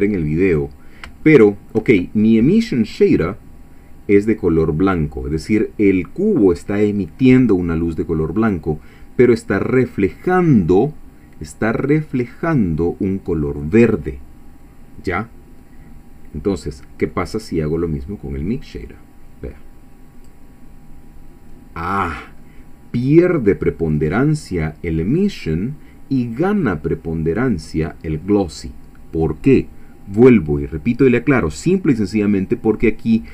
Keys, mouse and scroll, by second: 0.2 middle click, 1.3 shift+click, 16.6 middle click, 18.7-20.5 drag, 21.7 scroll down 1, 22.3 scroll up 2, 27.5 middle click.